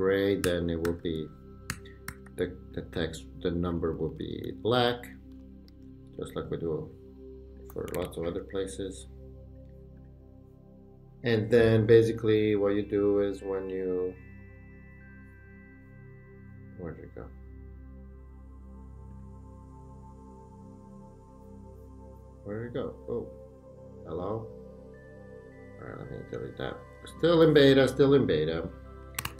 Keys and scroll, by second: 0.4 super+], 3.7 Left, 4.4 Down, 5.3 Left, 5.7 Right, 8.1 super+a, 28.9-29.3 typing.